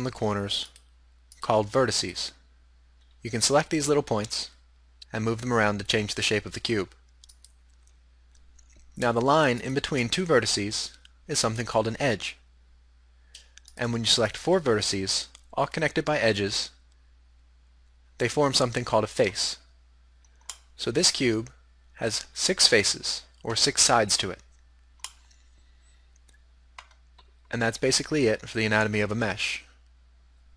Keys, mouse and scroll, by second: 3.1 g, 7.5-9.1 middle drag, 9.1 right drag, 9.7-11.4 right drag, 13.7-16.0 middle drag, 20.5-22.4 middle drag, 25.1-25.5 middle drag.